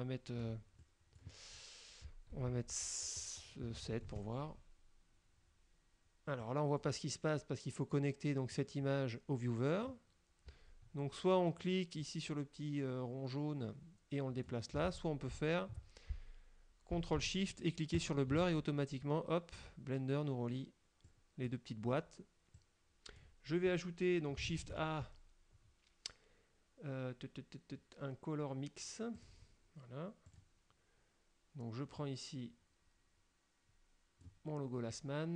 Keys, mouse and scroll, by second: 1.0 click, 3.9 KP_7, 4.2 KP_Enter, 6.5 click, 8.6-10.1 drag, 12.1-14.7 drag, 14.9 ctrl+z, 18.0 ctrl+shift+click, 21.1 click, 22.6 click, 24.7 shift+a, 29.3 click, 30.4 click, 32.1-34.5 drag.